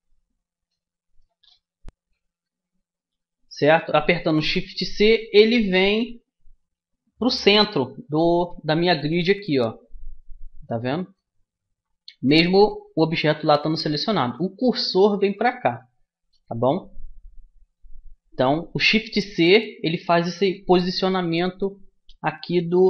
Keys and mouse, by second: 5.4-8.5 middle drag, 8.4 shift+c, 13.7 a, 19.7-21.6 middle drag.